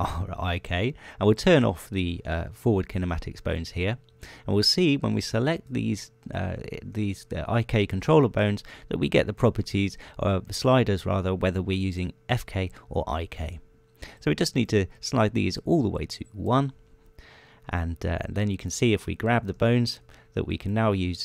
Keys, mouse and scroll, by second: 0.0 click, 2.8 click, 4.0 click, 6.2 right click, 7.8 shift+right click, 15.9 click, 17.2-18.4 drag, 20.2 right click.